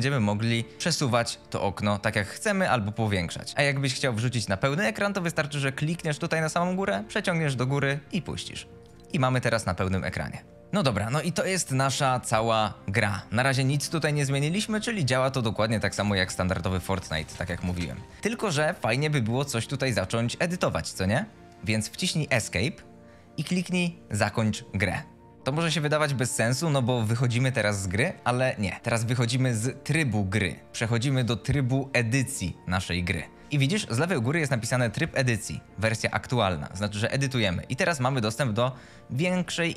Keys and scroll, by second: 10.9 w, 14.4 d, 15.6 e, 15.9 s, 17.0 a, 17.8 s, 18.2 w, 19.6 d, 20.0 w, 22.2 Escape, 38.3 a, 38.6 s.